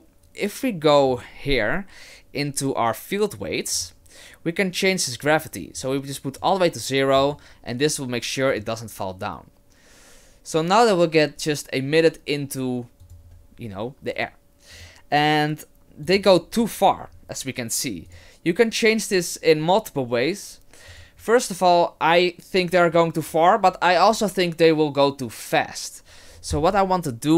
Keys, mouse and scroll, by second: 1.1 click, 3.7 click, 5.8 click, 7.2 click, 8.5 click, 13.1 click, 16.0 click, 18.1 click, 20.9 click.